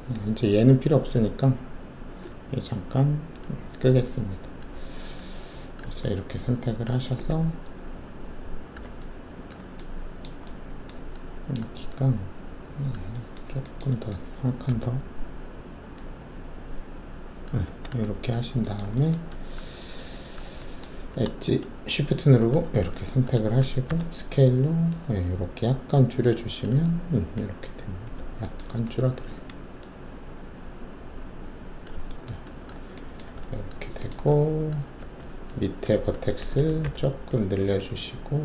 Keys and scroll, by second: 14.7 alt+e, 17.7 w, 23.8 alt+shift+r, 29.2 alt+w, 35.0 alt+1, 36.8 r.